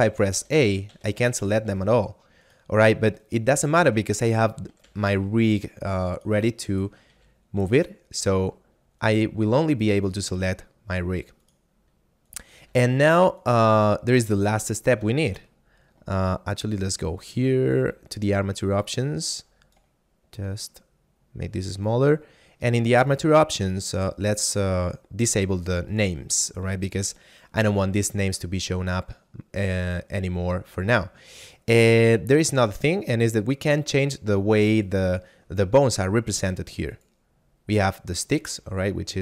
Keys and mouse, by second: 0.1 a, 1.7 g, 2.5 right click, 3.8 ctrl+Tab, 4.3 right click, 5.0 g, 6.2 right click, 7.2 r, 9.0 right click, 10.2 g, 11.5 right click, 12.7 r, 13.4 right click, 13.7 a, 14.5 shift+middle click, 16.8 click, 23.0 click, 24.0 middle click, 25.6 click, 36.8 click, 38.3 right click, 38.7 g.